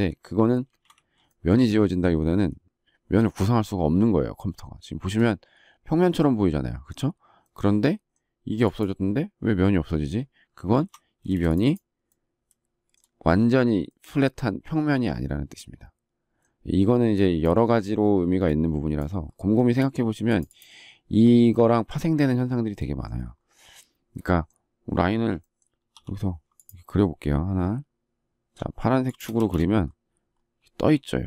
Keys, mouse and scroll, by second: 0.7 ctrl+z, 1.2 shift+middle click, 10.6 ctrl+z, 19.5 shift+middle click, 29.0 shift+click, 29.3 space.